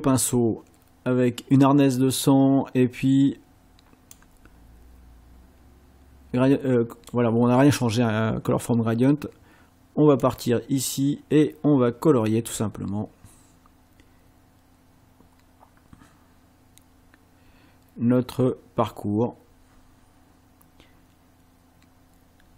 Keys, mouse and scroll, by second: 2.5 scroll down 1, 4.1-7.3 drag, 10.2-22.5 drag.